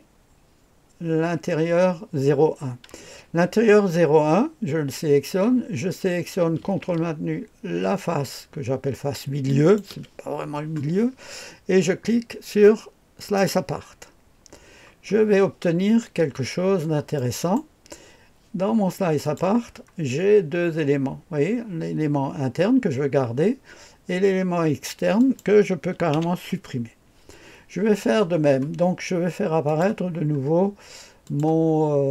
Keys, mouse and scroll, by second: 9.5 ctrl+click, 13.2 click, 14.8-16.7 scroll down 1, 16.7-17.6 scroll up 1, 17.2 right click, 19.2 click, 19.6-20.1 scroll down 2, 25.2 click, 26.1 Delete, 29.6 click, 30.0-31.2 scroll down 1, 31.2 click, 31.6-32.1 scroll down 1.